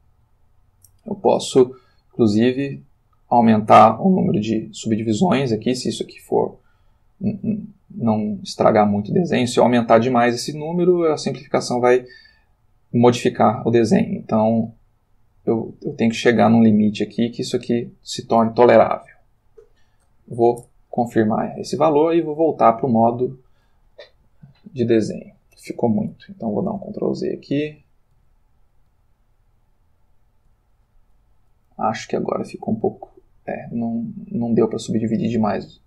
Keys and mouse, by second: 2.6 click, 4.0 click, 8.4-17.8 drag, 20.6 Return, 22.3 click, 23.1 click, 24.5-25.6 ctrl+middle drag, 26.1 ctrl+z, 27.6 ctrl+z, 29.2 ctrl+z, 33.3 click, 35.2-35.7 drag.